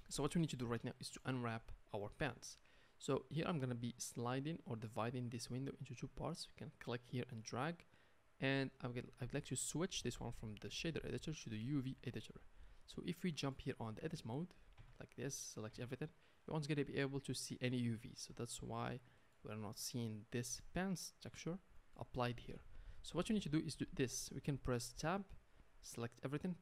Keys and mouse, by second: 14.8 Tab, 15.7 a, 19.6 Tab, 25.0 Tab.